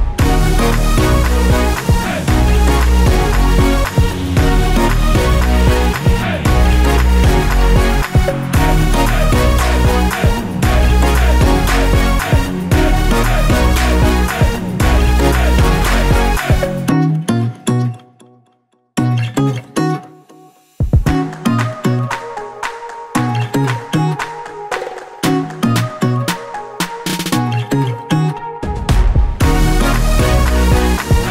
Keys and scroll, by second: 1.6-10.9 typing, 11.1 ctrl+Return, 16.9-17.9 typing, 19.3 v, 21.2 ctrl+t, 26.6 Return, 27.3 ctrl+z, 28.4 ctrl+t, 31.2 Return.